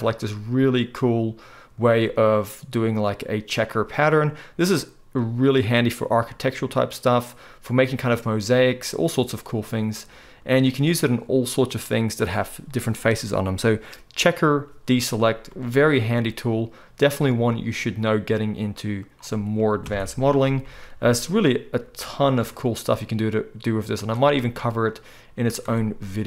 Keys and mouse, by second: 0.4-20.9 right drag, 20.6 g, 21.2-26.2 right drag, 24.2-25.6 middle drag, 25.6 Tab.